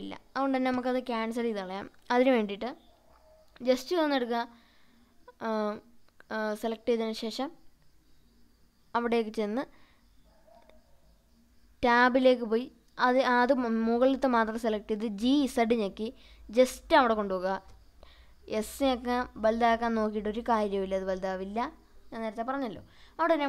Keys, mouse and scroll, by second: 2.5 click, 3.2 scroll up 2, 4.2 click, 4.2-5.2 scroll up 1, 5.9-6.4 scroll down 2, 7.8-8.4 shift+middle drag, 8.5-9.1 scroll up 2, 9.6-10.1 shift+middle drag, 11.2 Tab, 11.9 click, 13.2 g, 13.6 z, 16.5 click, 17.6 s, 19.7 click, 20.2 scroll up 1, 20.3-21.5 middle drag, 22.5 scroll down 1, 23.1-23.4 scroll up 2.